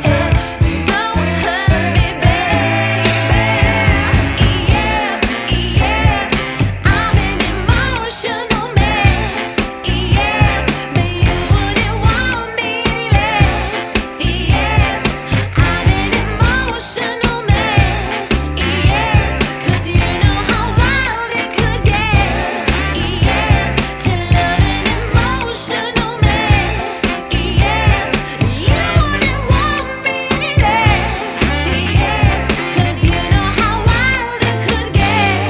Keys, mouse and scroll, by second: 1.2 scroll down 1, 1.3 scroll up 2, 1.4-1.9 scroll down 2, 1.9-2.5 scroll up 1, 4.8 click, 6.3 ctrl+shift+click, 8.6 click, 11.7 click, 13.8 scroll down 2, 13.9 scroll up 1, 14.0-14.6 scroll down 1, 14.9 scroll down 1, 16.2 click, 17.8 click, 20.5 click, 22.5 click, 23.6 click, 25.0 click, 26.1 shift+a.